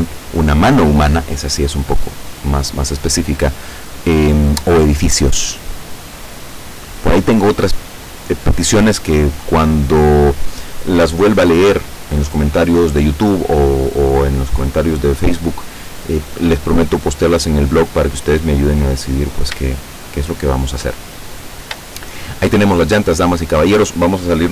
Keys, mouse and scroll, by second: 18.4-18.9 scroll down 2, 19.7-21.0 shift+middle drag, 21.2-21.8 shift+scroll up 3, 22.0-23.2 shift+middle drag.